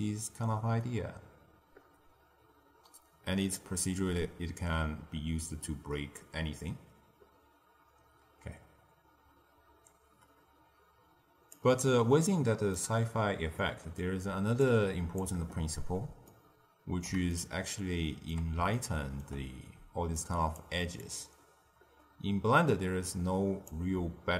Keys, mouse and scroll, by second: 12.2 middle click, 12.9-13.5 scroll down 2, 13.5-14.5 middle drag, 14.5 click, 16.2-19.7 ctrl+middle drag, 19.7 d, 20.1 click, 20.5 d, 20.9-23.6 drag, 23.6 d, 23.7 d.